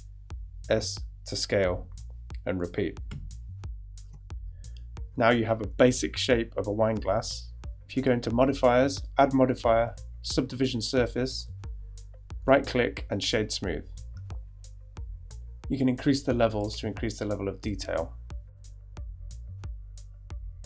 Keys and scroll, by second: 1.9 e, 3.1 s, 4.0 Tab.